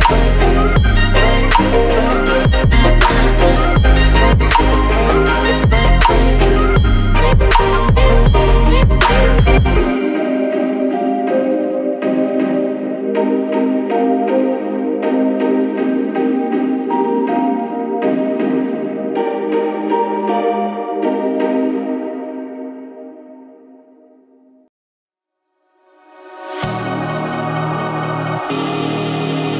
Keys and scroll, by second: 5.0 Return, 14.2 ctrl+c, 18.3 ctrl+v, 23.4 3, 23.7 6, 24.0 Return, 27.0 Up.